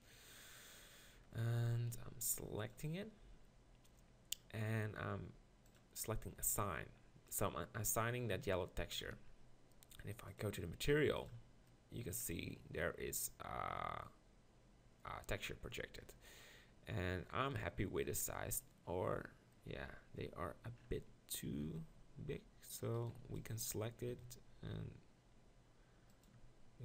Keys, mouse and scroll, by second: 0.9 click, 1.5 z, 2.0 b, 5.6-9.2 drag, 9.2 Tab, 11.3-11.8 drag, 16.2-17.2 middle drag, 19.8 Tab, 21.6 s, 23.7 b, 24.1 s, 26.2 click, 26.4 Tab.